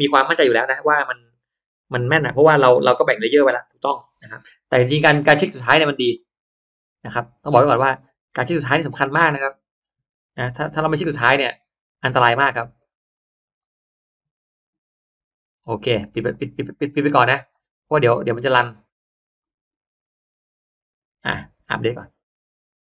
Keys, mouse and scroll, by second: 5.8 click, 6.5-7.7 scroll down 3, 7.1 middle click, 7.7 click, 10.7 click, 12.0 click, 13.1 click, 14.0 click, 16.2 click, 19.4 click.